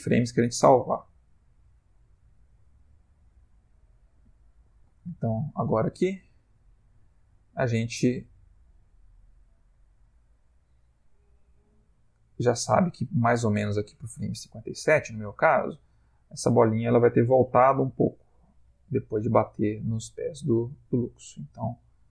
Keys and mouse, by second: 0.2 Right, 0.6 Right, 0.9 Right, 1.2 Right, 1.6 Right, 2.2 Right, 2.8 Left, 3.0-3.5 Left, 3.7 Left, 3.8 Left, 4.3 Right, 4.5 Right, 4.6 Right, 4.8 Right, 5.0 Right, 5.2 Right, 5.5 Right, 6.0 Right, 6.8 Right, 7.3 Right, 8.2 Right, 8.6 Right, 9.1 Right, 9.4 Right, 10.1 Right, 10.4 Right, 11.0 Left, 11.8 Left, 12.5 Left, 12.9 Right, 18.4 g.